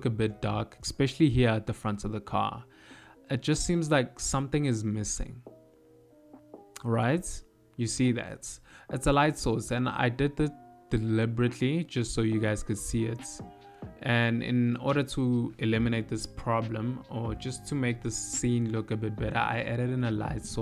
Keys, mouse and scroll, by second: 11.5 click, 12.5 click, 13.7 middle click, 14.3-15.7 scroll down 5, 15.7 middle click, 15.7-17.3 scroll down 3, 19.5 click.